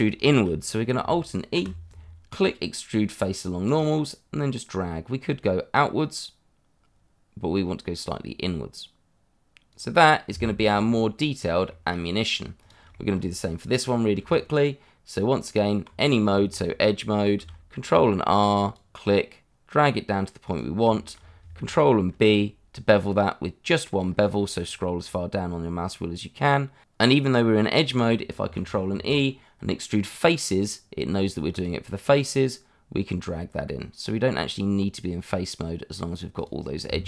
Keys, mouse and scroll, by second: 0.2 shift+middle click, 0.8 middle click, 1.5 alt+e, 3.6 click, 9.7 click, 9.9 scroll down 1, 10.4 Tab, 10.8 scroll down 1, 11.6 shift+middle click, 12.6 click, 12.9 middle click, 13.0 shift+middle click, 13.1-13.5 scroll up 2, 14.2 Tab, 17.3 ctrl+r, 18.6 click, 20.9 shift+middle click, 21.1 middle click, 21.1-21.9 shift+scroll up 2, 22.1 ctrl+b, 24.0-24.5 scroll up 1, 24.5-25.8 scroll down 1, 26.8 Tab, 27.0 scroll up 1, 27.3 shift+middle click, 28.4 alt+e, 31.5 click, 36.3 click, 36.7 scroll down 1.